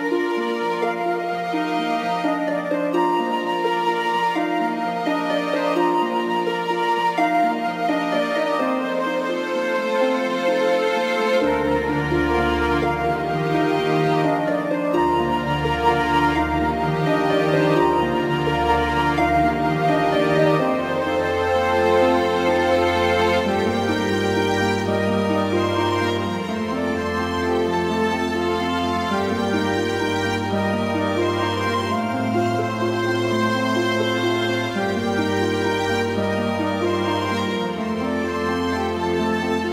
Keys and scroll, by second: 3.0 c, 4.0 m, 10.1 ctrl+z, 12.4 ctrl+z, 15.3 x, 16.5 ctrl+z, 19.4 x, 22.1 ctrl+z, 22.8 x, 24.2 x, 27.1 x, 29.3 x, 30.6 x, 32.5 x, 33.1 x.